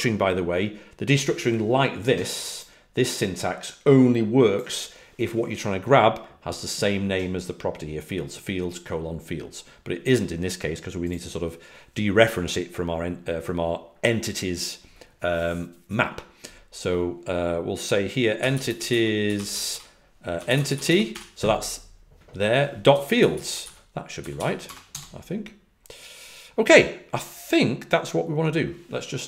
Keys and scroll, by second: 18.3-21.5 typing, 22.6-25.3 typing.